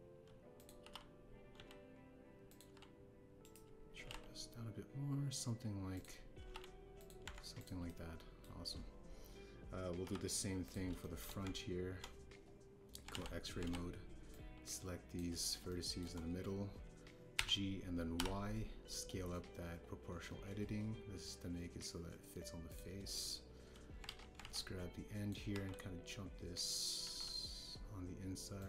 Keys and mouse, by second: 1.5 click, 1.8 r, 1.8 z, 2.5 x, 3.4 click, 3.6 g, 3.6 z, 5.0 g, 5.0 z, 6.9 click, 7.3 r, 7.4 x, 7.9 click, 8.2 Tab, 8.5 click, 8.8-9.3 middle drag, 9.3 click, 11.0 KP_7, 11.6 click, 12.0 shift+drag, 12.4 Tab, 14.1 alt+z, 14.6 alt+z, 15.3 click, 16.6 shift+click, 18.3 g, 19.1 y, 23.6 click, 25.0 alt+z, 25.3 alt+z, 25.5 click, 26.5 g, 26.5 x, 28.0 g, 28.1 x.